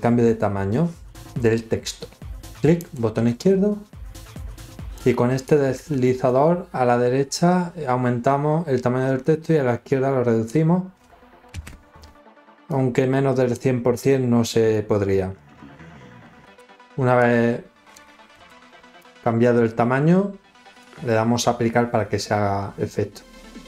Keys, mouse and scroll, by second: 2.7 click, 5.3-10.4 drag, 12.6 click, 17.1 click, 18.9-20.7 drag.